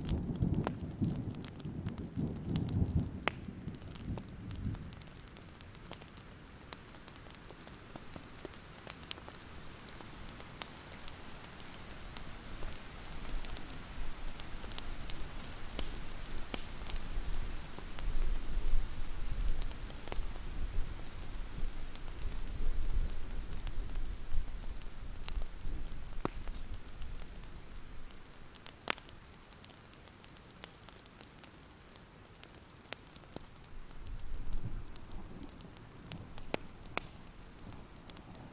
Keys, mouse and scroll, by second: 1.9 Delete, 2.6 click, 3.0 ctrl+scroll down 1, 3.3 scroll up 1, 4.0 click, 5.5 Delete, 6.6-7.7 scroll up 1, 7.7 click, 8.5 Delete, 8.7 scroll up 2, 8.9-9.3 alt+scroll down 1, 9.3 alt+scroll up 1, 10.3-10.9 ctrl+scroll down 1, 10.9 click, 11.4 Delete, 12.1 ctrl+z, 12.1 click, 14.0 scroll up 1, 14.8-16.4 alt+scroll up 1, 16.4-18.7 drag, 18.7 Delete, 19.0-23.8 drag, 23.8-24.1 scroll down 1, 24.5-27.2 drag, 27.3 alt+scroll down 1, 27.6 alt+scroll up 1, 28.3-31.5 drag, 31.6 alt+scroll down 1, 31.9 alt+scroll up 1, 32.4-35.0 drag, 35.1 alt+scroll down 1, 35.3 alt+l, 35.7 ctrl+z, 36.3-38.5 drag.